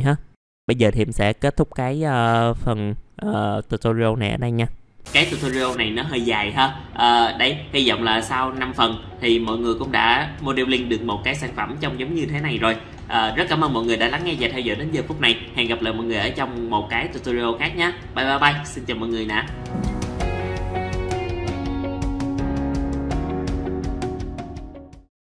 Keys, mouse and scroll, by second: 0.0 scroll down 1, 0.4 middle click.